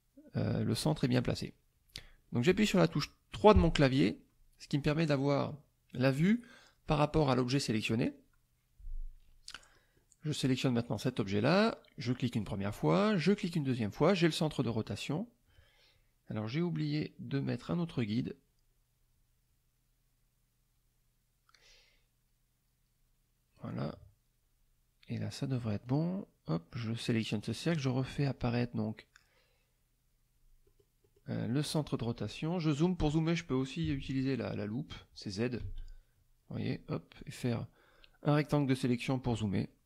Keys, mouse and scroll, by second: 3.5 KP_3, 9.7 middle click, 10.8 click, 13.2 click, 17.5-23.8 drag, 25.8 click, 27.4 click, 30.6 middle click, 31.3 middle click, 35.6 z, 37.2-38.5 drag.